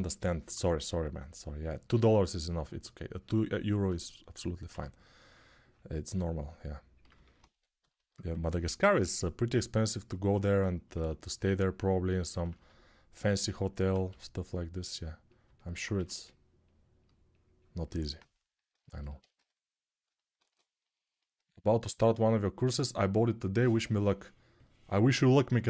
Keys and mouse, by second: 0.3 2, 4.4 1, 7.3 2, 8.1 2, 13.8 g, 15.7 1, 17.6-25.6 drag, 19.1 g.